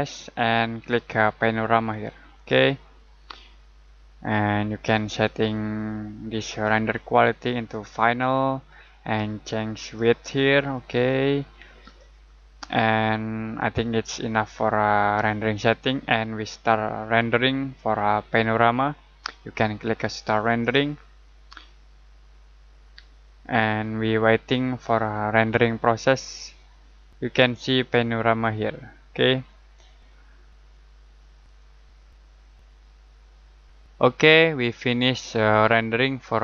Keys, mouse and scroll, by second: 2.2 click, 6.3 click, 20.5 click, 31.4 click.